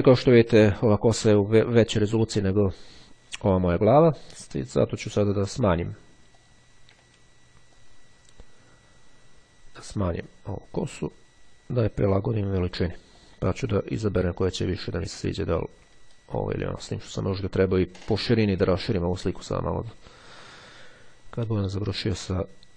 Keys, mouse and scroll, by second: 6.4 click, 7.8-10.4 ctrl+drag, 10.6 click, 13.2 click, 14.0-15.8 drag, 16.0-17.0 ctrl+scroll up 2, 19.4-19.9 ctrl+scroll up 2, 20.2-20.6 ctrl+scroll down 3, 20.6-22.7 drag.